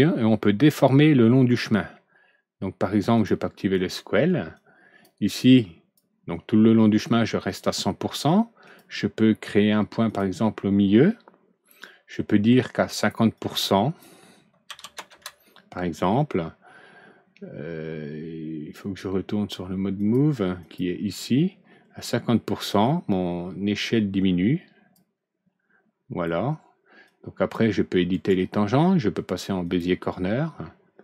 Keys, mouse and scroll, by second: 3.1 click, 4.5 click, 5.3 click, 8.6 click, 10.0 click, 13.3 click, 14.6 KP_5, 15.0 KP_Enter, 19.9 click, 20.5 click, 22.6-24.8 drag, 27.0 click, 28.0 right click, 29.6 click.